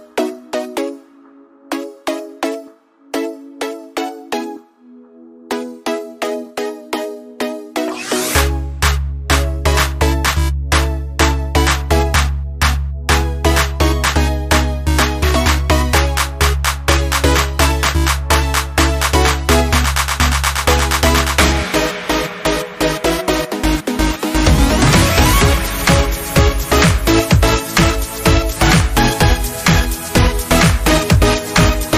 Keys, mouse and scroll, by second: 0.4 c, 3.0 space, 3.2 click, 3.5 space, 5.4 click, 10.7 click, 15.9 ctrl+v, 17.9 alt+scroll down 1, 19.3-25.8 drag.